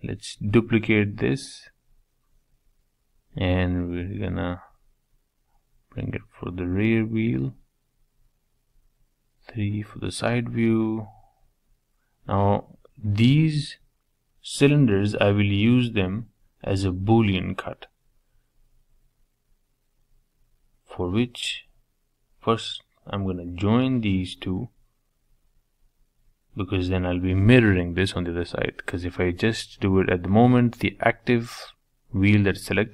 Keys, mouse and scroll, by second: 0.4-2.2 middle drag, 2.2 g, 4.4 shift+d, 7.3 KP_3, 8.2-8.9 scroll up 3, 8.9-10.0 shift+middle drag, 10.0-11.0 scroll down 1, 11.0 middle click, 11.4-12.0 scroll up 4, 12.0 scroll down 2, 12.2-14.2 middle drag, 14.2-14.5 scroll down 1, 14.5-16.4 middle drag, 17.2 scroll down 2, 17.4-19.0 middle drag, 19.0 shift+click, 19.4-21.4 middle drag, 22.8-23.1 scroll down 1, 23.1-29.9 shift+middle drag, 31.3 click.